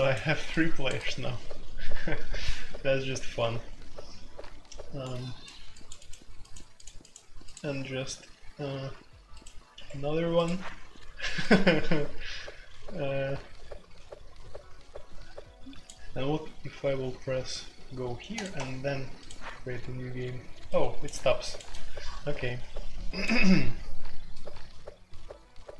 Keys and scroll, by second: 9.7 Escape, 18.5 Escape.